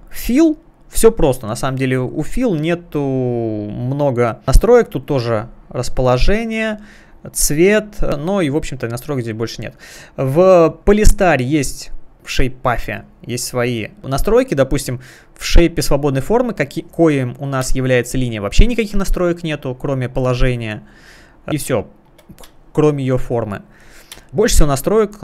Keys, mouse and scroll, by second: 0.2 click, 5.1 click, 5.4 click, 5.5 double click, 6.1 double click, 6.7 double click, 10.8 click, 12.1-12.9 scroll down 1, 12.9 scroll down 1, 13.9 click, 17.7 space, 17.8 click, 19.1 space, 19.4 click, 20.3 space, 21.3 click, 21.6 space, 22.5 click, 22.5 space, 22.9 click, 23.4 space, 23.9 click, 24.1 space, 24.9 click, 25.1 space.